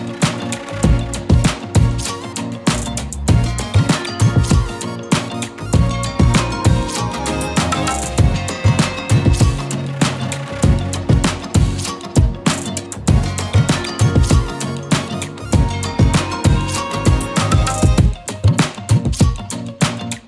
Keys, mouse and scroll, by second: 7.7 click, 11.3 click.